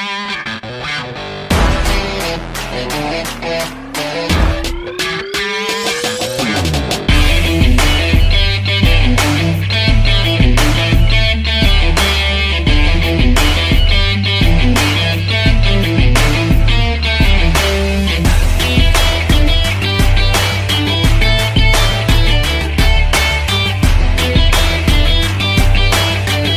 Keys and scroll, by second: 0.6 m, 15.8 ctrl+0, 22.8 p, 24.2 v.